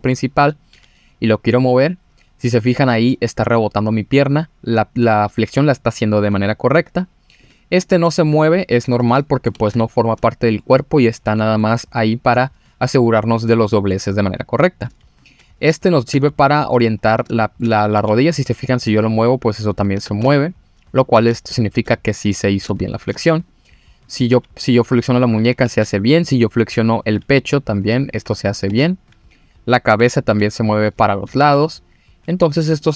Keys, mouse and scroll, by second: 0.1 middle drag, 0.7 g, 7.4 click, 7.8 middle drag, 9.1 middle drag, 9.5 ctrl+z, 9.9 scroll down 1, 10.0-10.6 middle drag, 11.3-11.6 middle drag, 13.9-14.8 middle drag, 15.2 click, 15.8 shift+middle drag, 16.4-16.7 middle drag, 16.9-17.3 scroll up 3, 17.4 shift+middle drag, 17.9 g, 19.7 click, 20.0 ctrl+z, 20.5-21.3 scroll down 4, 21.3-21.8 shift+middle drag, 22.3-22.7 middle drag, 22.7-23.1 shift+middle drag, 23.5 click, 24.0 click, 24.3 g, 25.4 click, 25.7 ctrl+z, 26.3 click, 26.9 click, 27.2 g, 28.0 click, 28.5 scroll down 2, 28.7 ctrl+z, 29.3 click, 30.0 f, 30.3 g, 31.1 click, 31.4 ctrl+z, 32.8 click.